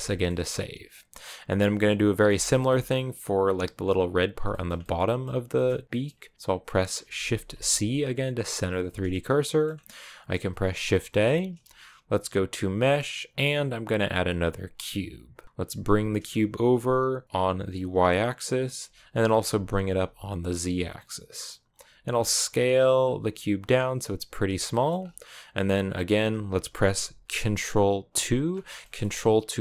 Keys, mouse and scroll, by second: 0.3-1.7 scroll up 1, 1.7-8.3 middle drag, 8.3 shift+c, 8.9-14.6 middle drag, 15.3 middle click, 15.6 g, 19.2 g, 22.0 s, 24.5 shift+middle click, 24.7-27.9 scroll up 2, 27.9 ctrl+2, 28.6 shift+middle click, 28.9 scroll up 1.